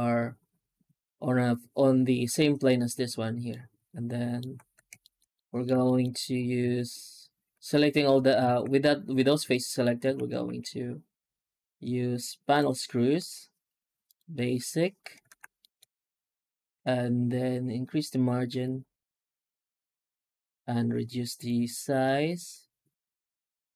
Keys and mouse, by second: 3.3 middle click, 3.7 alt+middle click, 3.8 alt+middle click, 4.5 Tab, 4.9 shift+middle drag, 5.2 alt+middle click, 5.5 middle click, 5.7 shift+middle drag, 6.1 alt+shift+z, 6.5 shift+q, 7.4 Tab, 8.3 alt+shift+z, 9.4 shift+middle click, 9.6 shift+middle click, 9.9 Tab, 10.3 shift+q, 15.2 alt+shift+z, 15.5 shift+middle drag, 16.6 F9.